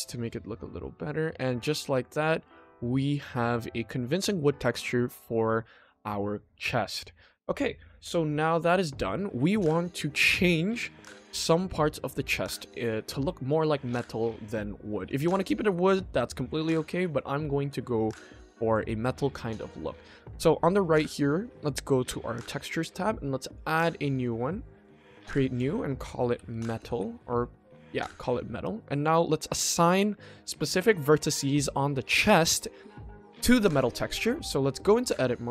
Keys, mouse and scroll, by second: 0.8 middle drag, 1.2-1.9 scroll down 1, 1.9-2.4 middle drag, 3.3-3.7 scroll up 1, 3.7 middle drag, 7.1 scroll down 1, 8.2 middle drag, 8.9 middle drag, 9.2-9.6 scroll down 1, 10.1 middle drag, 11.1 ctrl+s, 11.5-11.9 middle drag, 12.7 middle drag, 13.4 middle drag, 14.0 middle drag, 14.7 shift+middle drag, 15.0 middle click, 16.4-16.8 middle drag, 17.7 ctrl+s, 21.6 click, 23.4 click, 24.9 drag, 25.5-27.1 drag, 28.3 middle drag, 33.7 click, 33.9 Tab, 34.6 click.